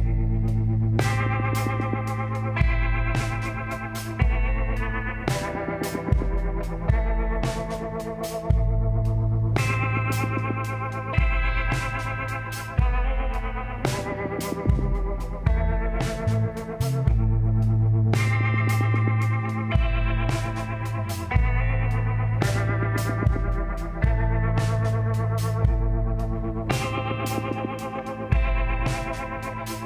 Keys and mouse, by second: 2.4 l, 2.8 l, 3.3 l, 4.0 l, 5.2 shift+d, 5.8 r, 9.9 z, 11.0 a, 11.3 a, 13.1 ctrl+n, 14.5-20.4 drag, 20.4-22.5 middle drag, 20.8 Tab, 24.4 ctrl+a, 29.1 Tab.